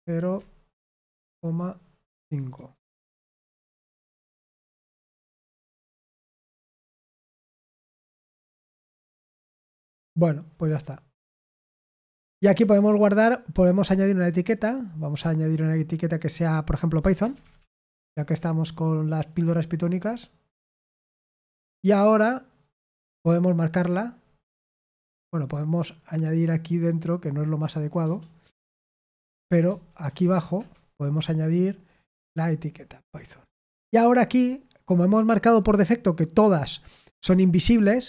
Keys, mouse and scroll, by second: 1.1 typing, 6.6-7.6 typing, 21.9-30.5 drag, 30.5 Return.